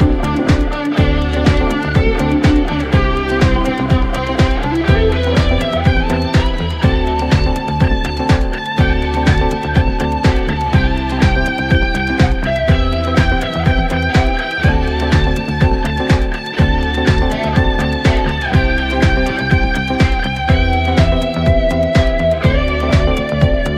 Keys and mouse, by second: 4.0 middle click, 4.3 middle click, 5.4 middle click, 6.5 middle click, 7.5 middle click, 7.7 middle click.